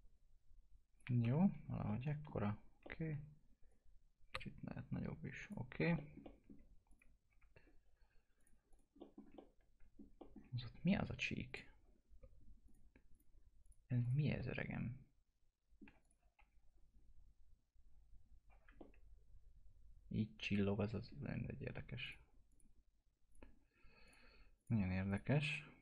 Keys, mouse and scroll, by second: 1.2 F3, 1.5-1.8 scroll down 1, 1.9 alt+middle click, 3.7-5.7 drag, 5.7 scroll down 1, 5.9 middle click, 6.9 click, 7.2 scroll down 1, 7.3 F4, 8.4 click, 9.0 middle click, 9.1 scroll down 1, 9.4 alt+middle click, 10.2 middle click, 10.6-11.5 scroll up 2, 10.7 F4, 11.5 click, 14.6-16.0 alt+middle drag, 16.0 click, 16.4 F4, 16.9 scroll up 1, 18.7-19.1 scroll down 1, 19.1-22.0 alt+middle drag, 22.0 click.